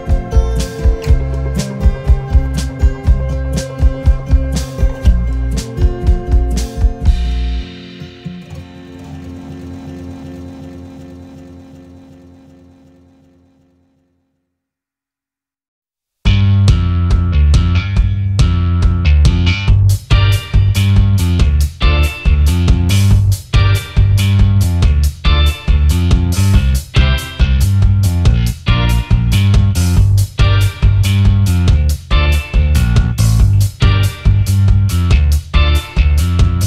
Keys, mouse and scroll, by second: 1.9 double click, 4.1 ctrl+g, 4.7 space, 4.8 double click, 5.8 double click, 6.0 space, 6.0 double click, 8.0 double click, 9.9 space, 10.0 double click, 11.2 double click, 12.6 space, 13.9 shift+click, 16.8 alt+scroll up 1, 18.2 right click, 22.8 shift+click, 24.2 alt+scroll down 1, 24.8-25.2 alt+scroll down 1, 25.3 alt+scroll up 1, 27.3 shift+click, 28.5 alt+scroll down 1, 29.0 alt+scroll up 1, 31.9 alt+scroll down 1, 32.5 alt+scroll up 1, 34.4 alt+scroll up 1.